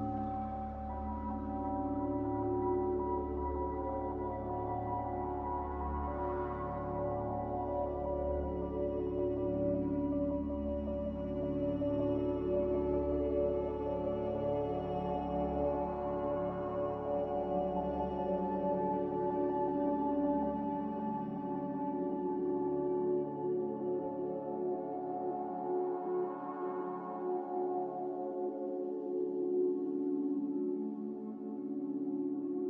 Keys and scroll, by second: 3.4-4.1 typing.